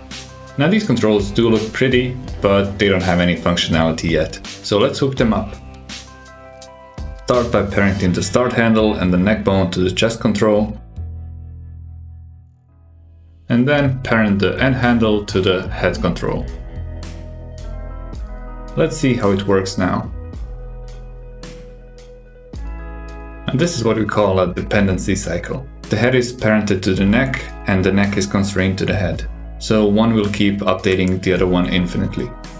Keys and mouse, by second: 0.5 click, 0.8 g, 2.5 click, 2.7 g, 4.9-5.7 drag, 6.3 alt+z, 7.6 click, 8.9 shift+click, 10.0 shift+click, 11.3 ctrl+p, 14.7 click, 15.5 shift+click, 16.9 ctrl+p, 19.5-20.8 drag, 21.7 g, 28.3 super+KP_6, 32.0 click.